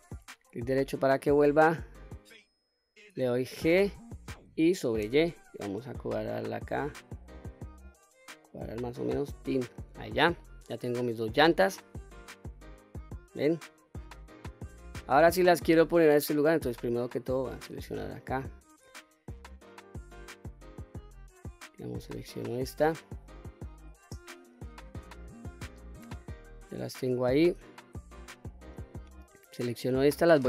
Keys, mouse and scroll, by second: 0.3 right click, 3.6 g, 5.0 y, 9.4 click, 10.1-10.5 scroll down 2, 10.4-11.5 middle drag, 12.1 scroll down 1, 12.4-15.3 middle drag, 16.1 middle drag, 16.5 scroll down 1, 17.0 click, 21.8-24.9 scroll up 4, 24.9-26.2 middle drag, 29.0 shift+click.